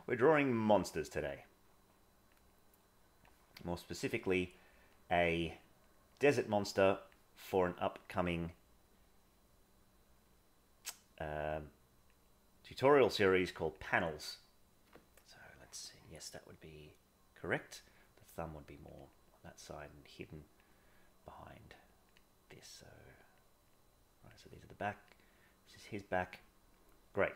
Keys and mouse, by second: 0.9 click, 1.1-2.3 drag, 2.6 click, 3.8 click, 4.5 click, 4.9 click, 5.5 click, 6.1 click, 6.5 click, 6.8 click, 8.0 click, 10.1-11.2 drag, 11.5 click, 12.3 click, 13.3 click, 13.9 click, 17.6 click, 17.8 click, 18.3 click, 19.0 click, 19.2 click, 20.3 click, 21.3-22.6 drag, 23.0 click, 23.4 click, 23.8 click, 25.1 click, 27.1 click.